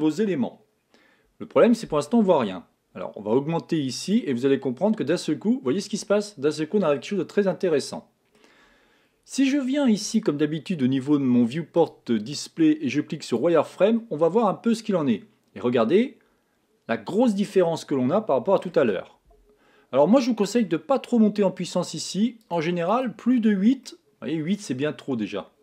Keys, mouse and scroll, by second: 4.5 click, 6.7-7.9 scroll up 5, 7.9-10.5 middle drag, 10.5 click, 12.2 click, 14.2-14.6 scroll down 2, 14.6-17.6 middle drag, 20.8 click, 22.8 click, 24.2-25.3 middle drag, 25.3 scroll up 1.